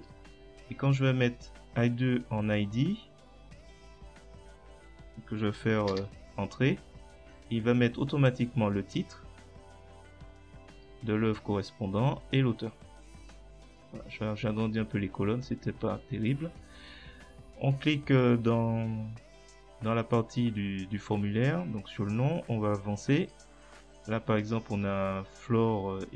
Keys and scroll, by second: 5.9 Return.